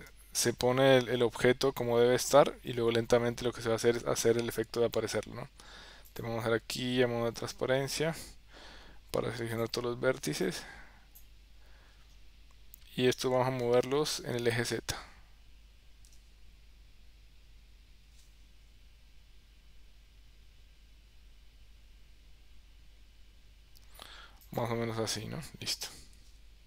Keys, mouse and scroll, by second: 1.1 KP_1, 3.2 KP_3, 9.7 click, 10.6 click, 15.3 g.